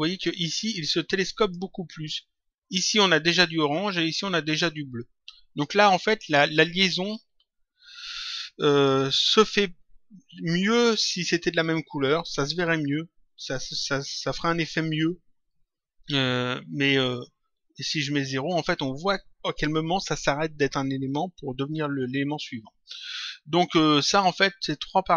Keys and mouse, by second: 1.3 click.